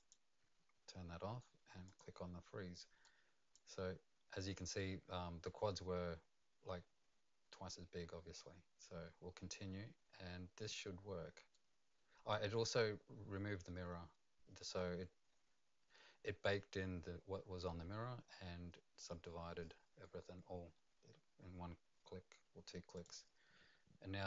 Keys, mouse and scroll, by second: 1.8 click, 11.5 right click, 22.9 click.